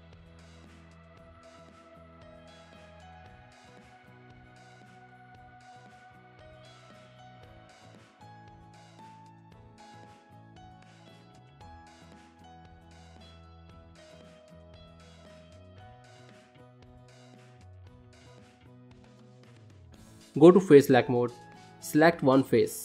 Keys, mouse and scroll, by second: 0.5 click, 0.8 g, 2.6 shift+middle click, 3.4 click, 3.7 g, 4.8 shift+middle click, 5.6 click, 6.0 g, 8.7 click, 9.1 g, 11.6 shift+middle click, 13.1 click, 13.5 g, 15.2 g, 16.2 click, 16.9 g, 17.7 shift+middle click, 18.4 ctrl+middle click, 18.7 shift+middle click, 19.2 ctrl+middle click, 20.4 click.